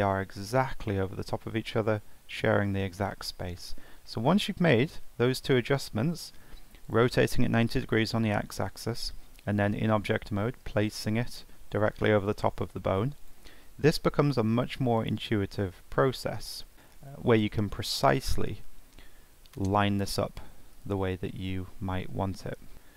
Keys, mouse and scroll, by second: 0.7 middle click, 1.2 middle click, 4.1 middle click, 4.4 middle click, 5.4 shift+middle click, 22.7 middle click.